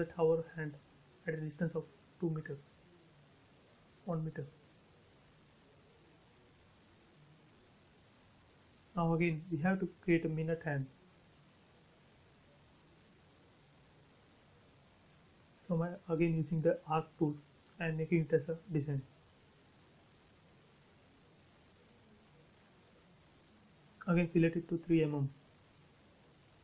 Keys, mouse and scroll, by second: 0.6 m, 0.7 click, 1.9 Right, 2.8 1, 2.9 Return, 3.5 space, 4.2 click, 7.6 a, 8.1 click, 11.0 click, 12.6 space, 13.9 a, 14.4-15.1 scroll up 1, 15.1 click, 19.7 space, 20.4 click, 20.9 click, 21.8-22.2 scroll up 1, 22.2 f, 22.9 click, 24.0-25.1 typing, 24.8 Return, 25.7-26.5 scroll up 1.